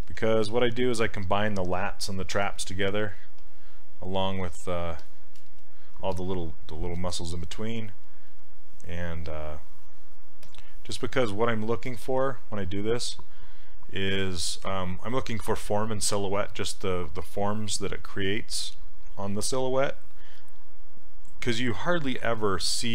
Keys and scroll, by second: 2.4 w.